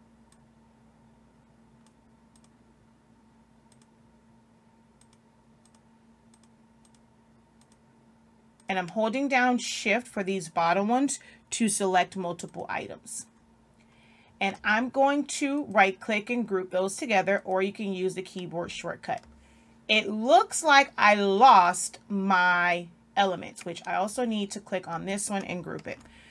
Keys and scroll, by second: 25.8 ctrl+g.